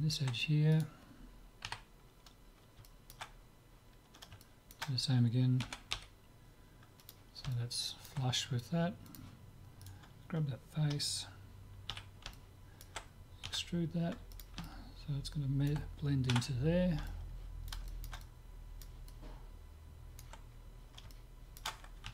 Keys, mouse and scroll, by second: 0.7 click, 1.7 KP_3, 2.9-6.1 middle drag, 5.6 g, 7.5-9.1 middle drag, 9.1-10.8 drag, 9.8-11.8 right drag, 12.0 z, 12.4-14.5 middle drag, 13.4 e, 14.6-16.6 middle drag, 16.4 Tab, 16.8-22.0 middle drag.